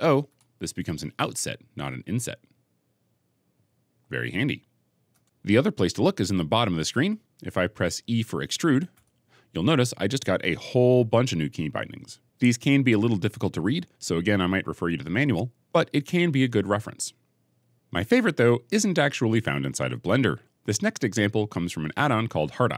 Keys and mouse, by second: 0.3 o, 3.2 middle click, 5.0 Escape, 6.1 middle click, 8.8 e, 17.7 ctrl+z.